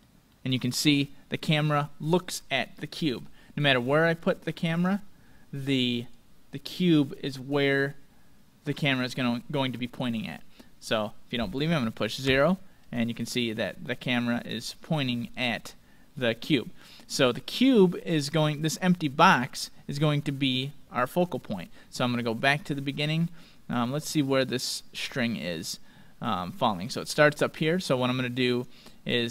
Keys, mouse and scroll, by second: 0.3-5.4 middle drag, 4.1-6.0 drag, 6.2-8.0 drag, 12.2 KP_0, 13.7-18.7 middle drag, 15.8-16.2 scroll up 1, 16.2-16.6 scroll down 1, 20.2-23.2 middle drag, 22.2-25.1 drag, 28.4-29.3 drag, 29.1-29.3 right drag.